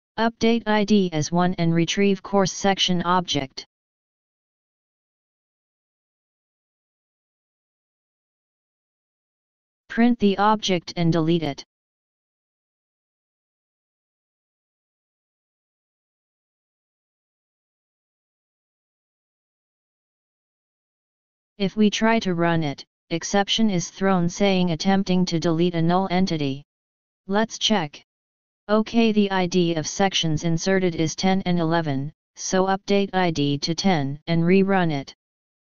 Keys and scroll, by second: 6.4 Delete, 6.7 Delete, 7.8 ctrl+c, 11.1 ctrl+d, 11.9 ctrl+d, 12.7 ctrl+d, 16.6 ctrl+s.